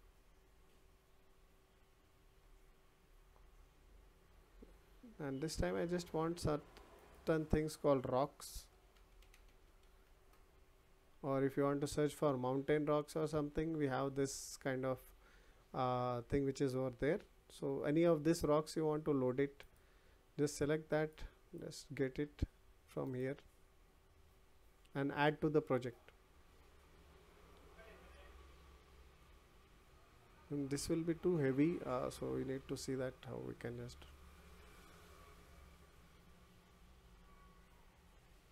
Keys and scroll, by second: 10.1 Return.